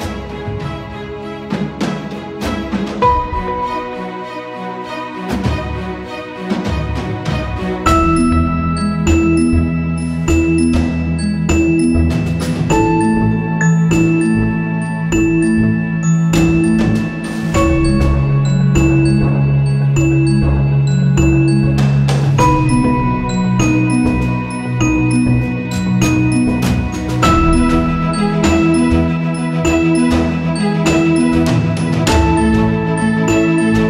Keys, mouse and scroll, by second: 2.3 click, 2.8 right click, 3.3-13.1 drag, 13.1 right click, 13.7 click, 18.4 click, 20.3 click, 23.1 click, 29.4 right click, 30.3 click, 32.8 click.